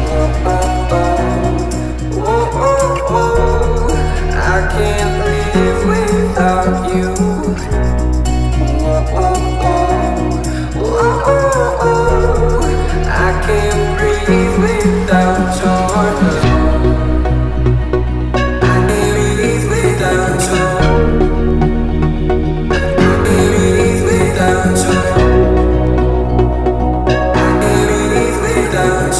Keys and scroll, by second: 9.0 t, 10.9 space, 11.1 Escape, 11.5 t, 13.2 space, 15.8 l, 17.0 space, 17.8 p, 22.8 t, 24.4 1, 24.5 Return, 24.7 space, 25.3 l, 26.5 space, 27.3 p.